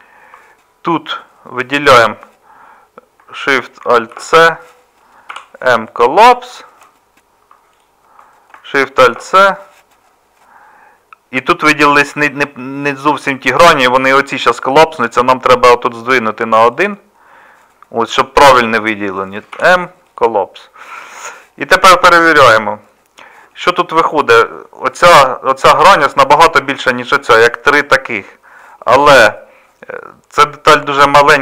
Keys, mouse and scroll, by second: 4.2 alt+shift+c, 5.3 m, 6.8 alt+shift+c, 9.1 alt+shift+c, 19.5 m, 28.2-31.4 middle drag.